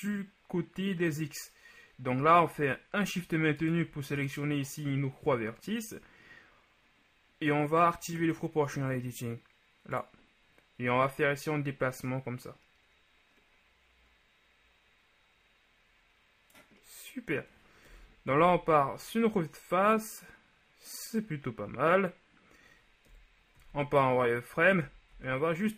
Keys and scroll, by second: 18.0 KP_1, 23.2 KP_1, 23.6 z, 24.8 a, 25.2 a.